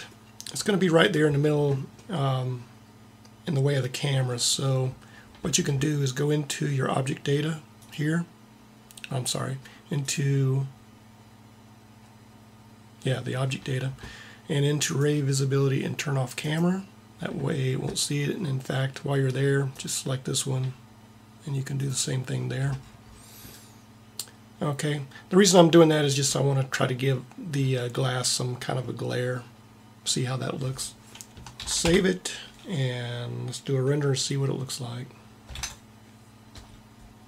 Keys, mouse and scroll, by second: 31.4 ctrl+s, 35.4 ctrl+Up.